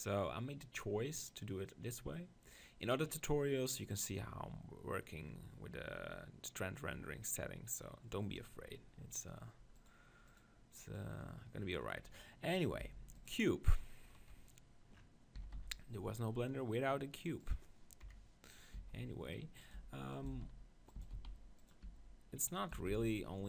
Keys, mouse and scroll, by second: 10.0-11.6 drag, 12.8 g, 13.2-14.9 drag, 14.1 KP_1, 15.1 middle click, 15.3 s, 17.5-19.4 drag, 18.0-22.7 typing, 19.7-21.5 drag.